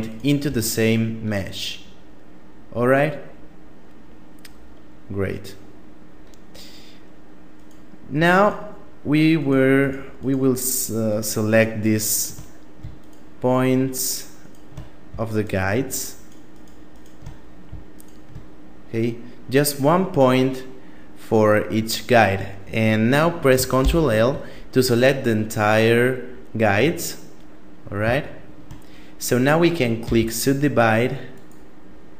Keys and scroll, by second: 23.2 ctrl+l, 29.4 w, 31.6 w.